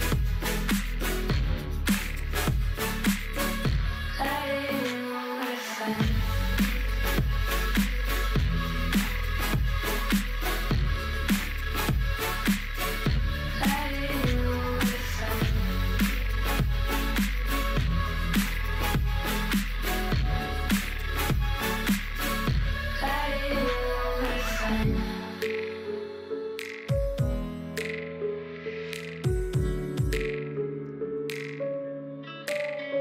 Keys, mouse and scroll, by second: 0.0 g, 0.6 click, 0.8 g, 2.0 click, 2.4 g, 3.7 click, 4.1 g, 5.2 ctrl+r, 6.8 click, 7.3 g, 8.2 click, 8.7 g, 10.0 click, 10.3 g, 11.6 click, 11.9 g, 13.3 g, 14.9 ctrl+r, 15.4 click, 15.7 g, 16.6 click, 16.9 g, 18.0 ctrl+r, 18.5 click, 18.9 g, 20.3-20.9 scroll down 3, 20.9-22.0 shift+middle drag, 22.0 click, 23.3 KP_7, 23.9 shift+middle click, 24.2-24.5 scroll up 2, 24.5 shift+middle click, 24.8-26.1 scroll up 1, 26.3 l, 26.6 g, 28.3 click, 28.9 x, 29.5 click, 29.9 g, 32.9-33.0 scroll up 2.